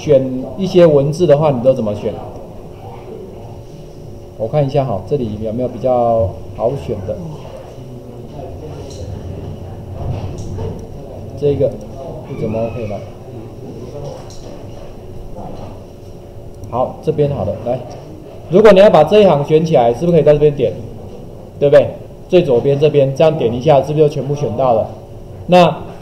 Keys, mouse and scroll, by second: 1.6 click, 16.5 click, 19.2 click.